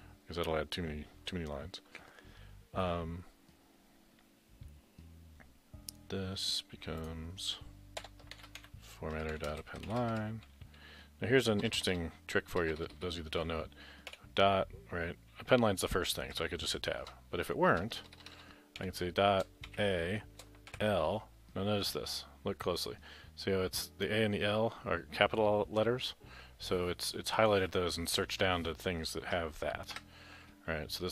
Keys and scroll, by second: 8.0 Return, 8.6-13.0 typing, 16.4 Tab, 16.4-19.8 typing, 20.8 shift+l, 30.0 Tab.